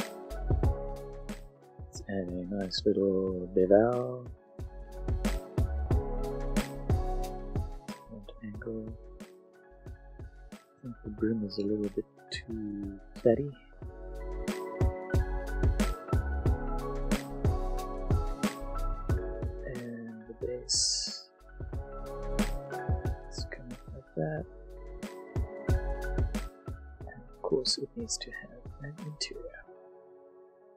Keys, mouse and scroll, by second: 0.1 click, 0.1 middle click, 0.3 middle click, 0.4 right click, 0.5 click, 4.2 click, 7.8 click, 8.1 middle click, 8.6 shift+middle click, 9.3 middle click, 9.4 middle click, 10.4 shift+Tab, 10.9 alt+click, 11.4 alt+click, 11.8 middle click, 12.2 alt+s, 14.5 click, 14.7 middle click, 17.6 click, 19.7 alt+click, 20.1 click, 23.1 middle click, 23.6 s, 24.5 click, 24.7 e, 25.7 click, 25.9 middle click, 27.0 s, 27.5 click, 27.8 Tab, 28.1 middle click, 30.5 click.